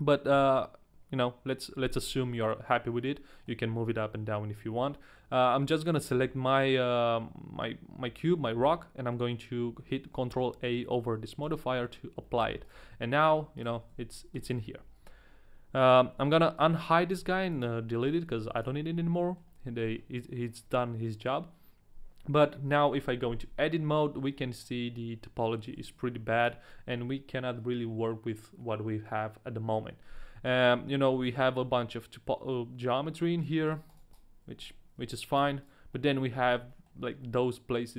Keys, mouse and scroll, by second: 0.3 KP_1, 2.0 scroll up 1, 2.3 middle click, 2.9-3.3 scroll down 1, 3.3 middle click, 4.5 right click, 5.0 middle click, 11.5 ctrl+a, 12.2 middle click, 12.5 a, 12.6 right click, 12.9 g, 13.6 right click, 13.8 Tab, 14.3 Tab, 16.2 Tab, 16.2 alt+h, 16.2 right click, 16.3 a, 16.6 right click, 17.1 x, 18.0 right click, 18.4 right click, 18.4 a, 18.4 x, 18.9-19.2 scroll up 1, 19.2 middle click, 19.4-20.5 scroll down 1, 23.0 Tab, 23.4 a, 23.7 middle click, 24.3-24.6 scroll up 1, 24.6 middle click, 26.0 ctrl+Tab, 26.0 middle click, 26.0-26.4 scroll up 1, 26.0 a, 30.5 scroll up 1, 31.2 middle click, 31.7 shift+middle click, 31.7-33.4 scroll up 1, 33.4 right click, 33.7 right click, 33.9 right click, 34.1 right click, 34.7 ctrl+z, 34.7 right click, 35.1 ctrl+z, 35.1 right click, 35.4 a, 35.6 right click, 35.9 middle click, 36.1-36.7 scroll down 2, 36.6 right click, 36.6 shift+middle click, 36.6 a, 36.7 middle click, 37.2 middle click.